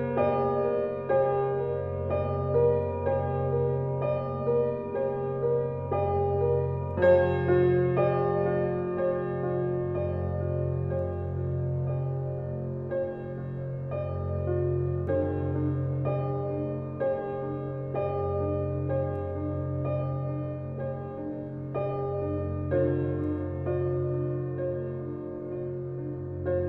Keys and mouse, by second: 0.0 click, 1.1 click, 2.1 click, 2.5-3.5 drag, 4.1 click, 4.4 click, 4.7-8.6 drag, 9.3 1, 9.7 ctrl+alt+click, 10.6 click, 11.5 click, 12.4 click, 13.1 click, 14.0 click, 14.6 click, 15.5 click, 15.7 click, 16.3-18.0 ctrl+alt+drag, 19.4 ctrl+s, 21.3 click, 22.6 click, 24.0 F12.